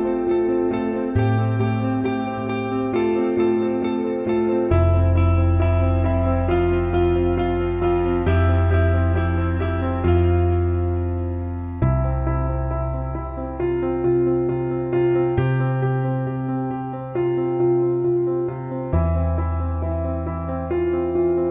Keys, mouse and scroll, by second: 1.7 alt+middle click, 4.2 alt+middle click, 5.6 click, 5.7-8.0 drag, 8.2 alt+middle click, 9.0 click, 9.8 alt+middle click, 11.3 Tab, 12.1-13.3 middle drag, 13.5-15.1 alt+shift+middle drag, 17.1 alt+shift+middle click, 20.8 alt+middle click, 21.2 alt+shift+middle click.